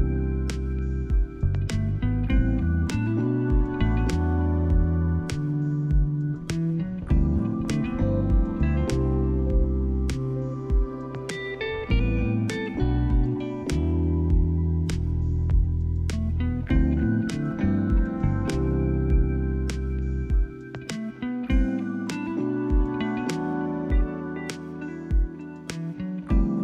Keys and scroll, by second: 0.8 Delete.